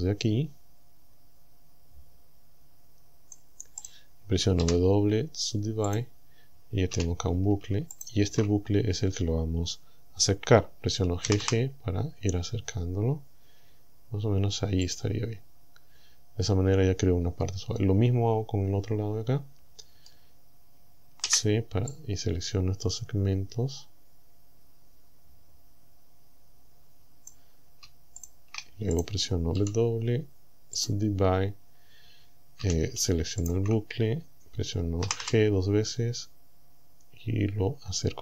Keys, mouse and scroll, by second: 3.9 right click, 4.6 w, 5.9 click, 7.0 a, 8.0 alt+shift+right click, 8.8-9.1 scroll up 2, 11.3 g, 14.9 click, 15.5-15.9 scroll up 1, 15.9-16.3 scroll down 1, 17.2 scroll down 1, 17.8-20.3 middle drag, 21.3 c, 22.0-27.5 drag, 28.2 shift+click, 29.0 right click, 29.6 w, 30.8 click, 32.6 a, 33.5 alt+shift+right click, 35.1 g.